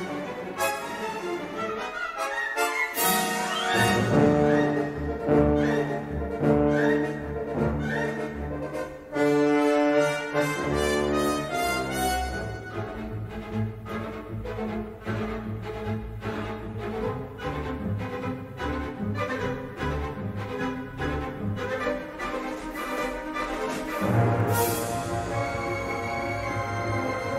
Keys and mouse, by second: 0.5 g, 4.9-6.5 middle drag, 7.5 a, 8.1 s, 10.9 l, 12.3 l, 12.9 s, 15.2 s, 19.3 g, 22.5 l, 23.6 l, 24.8 g, 26.6-27.3 middle drag.